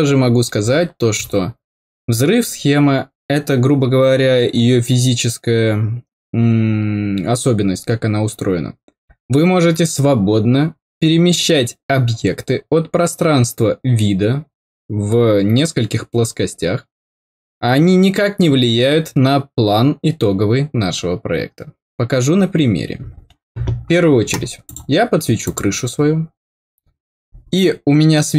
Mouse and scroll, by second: 24.6 click, 25.4 click.